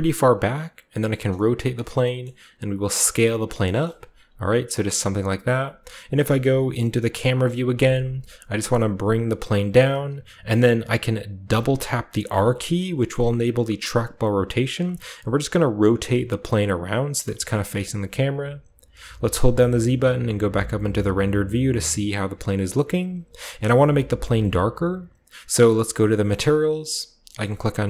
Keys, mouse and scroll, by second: 0.0-0.8 typing, 0.3 click, 1.7 click, 1.9-3.0 scroll down 1, 2.0 middle drag, 2.3 typing, 3.3 click, 4.0-5.3 typing, 4.3 click, 5.0 drag, 5.4 click, 7.0-9.1 typing, 9.7-11.1 drag, 12.2 r, 12.3 r, 16.8 drag, 17.1 r, 17.3 click, 17.4 g, 17.6 click, 18.2-19.2 scroll up 1, 19.2-19.9 typing, 19.9-20.2 scroll up 1, 26.2 click, 27.5 click.